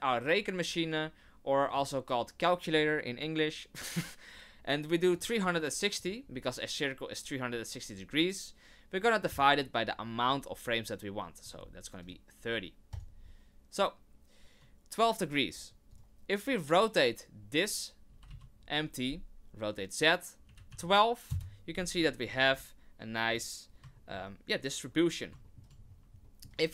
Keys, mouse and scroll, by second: 18.0 r, 22.1 shift+middle click, 22.4 scroll up 4, 23.2-23.8 scroll down 4, 23.9 shift+middle click, 25.2 scroll down 1, 25.4 shift+middle click, 25.7-26.2 scroll up 4, 26.2 shift+middle click, 26.6 scroll up 1.